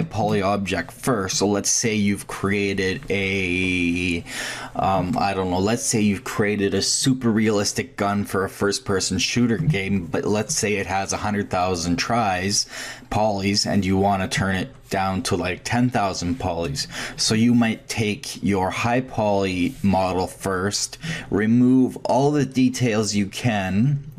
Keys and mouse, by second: 2.0-2.3 drag.